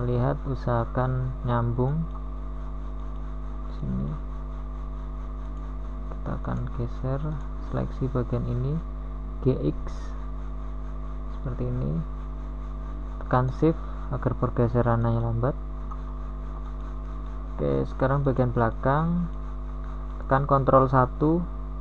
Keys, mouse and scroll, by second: 3.5-6.4 middle drag, 10.5-11.6 middle drag, 14.0 g, 21.4 a.